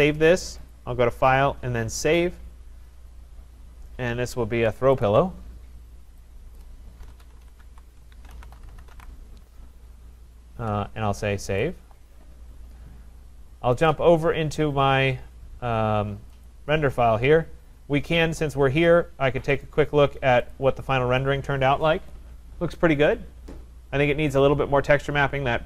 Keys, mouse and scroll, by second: 0.7 click, 2.2 click, 5.1 click, 6.6 click, 6.8-9.4 typing, 11.6 click, 13.9 click, 16.7 click, 18.9 click, 19.6 click, 20.6 click.